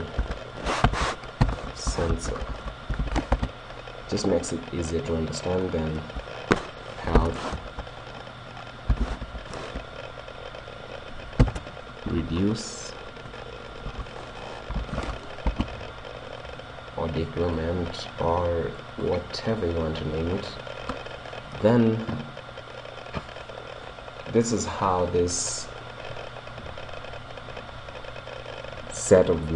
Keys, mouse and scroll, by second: 5.7-7.6 drag, 17.5-20.6 drag, 20.5 right click.